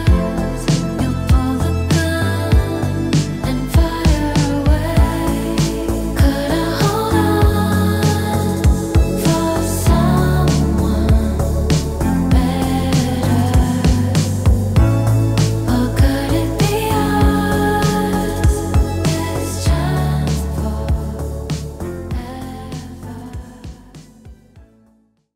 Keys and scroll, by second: 4.2 x, 4.8 s, 6.2 x.